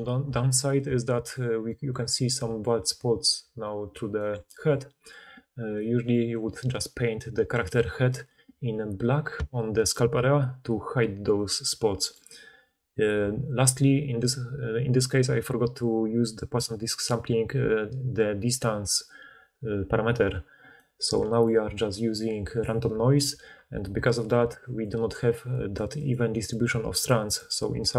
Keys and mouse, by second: 1.2-4.8 drag, 2.3-3.4 d, 3.5-4.8 middle drag, 3.5-4.8 right drag, 4.1 d, 23.2-27.9 typing.